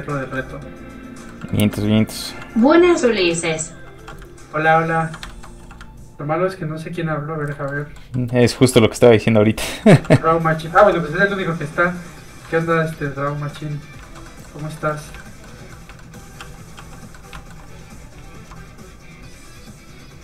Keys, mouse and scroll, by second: 0.5 ctrl+click, 1.3 click, 1.4 middle click, 1.9 ctrl+click, 2.6 click, 2.7 middle click, 3.1 shift+middle click, 3.3 middle click, 3.4 middle click, 4.0 f, 4.1 click, 4.4 ctrl+click, 5.3 shift+middle click, 5.6 middle click, 5.7 f, 5.8 ctrl+click, 7.7 ctrl+middle click, 8.8 middle click, 8.8 f, 8.9 click, 9.2 ctrl+click, 9.7 click, 9.8 middle click, 10.0 f, 10.1 click, 10.8 ctrl+click, 10.9 ctrl+z, 11.2 ctrl+click, 12.5 click, 12.6 middle click, 13.1 ctrl+click, 13.8 click, 14.1 shift+middle click, 14.3 middle click, 14.5 scroll up 1, 15.0 middle click, 15.1 middle click, 15.2 shift+middle click, 15.8 middle click, 16.4 shift+f, 16.5 click, 16.9 click, 17.2 middle click, 17.3 shift+middle click, 19.2 click.